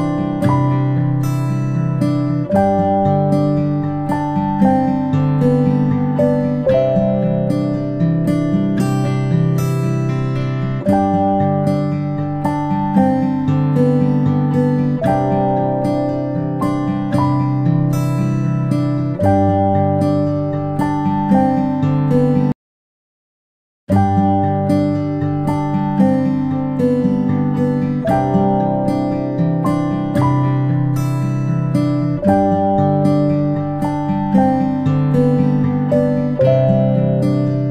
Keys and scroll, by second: 8.2 ctrl+z, 16.3 ctrl+Delete, 17.2 ctrl+Delete, 18.7 Delete, 19.8 ctrl+z, 23.5 Delete, 24.4 ctrl+z.